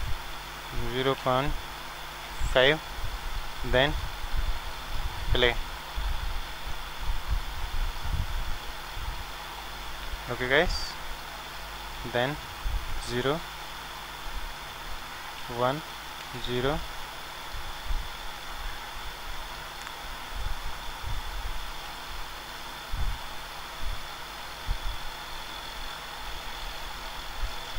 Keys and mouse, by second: 4.5-6.9 drag, 6.9-9.7 middle drag, 11.2-13.0 drag, 13.0 KP_0, 15.4 KP_1, 16.2 ctrl+alt+KP_0, 21.9 ctrl+z, 25.4-27.3 drag.